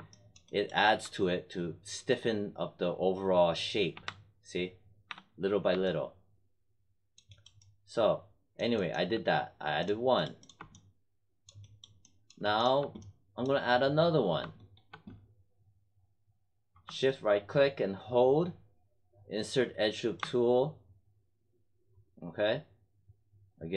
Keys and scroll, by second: 3.9 3, 5.0 1.